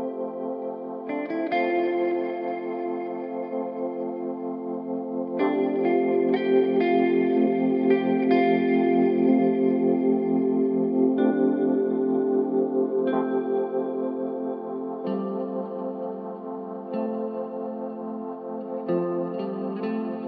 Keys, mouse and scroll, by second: 2.1-3.0 scroll up 10, 6.3 click, 9.5-19.9 drag, 20.1-20.2 drag.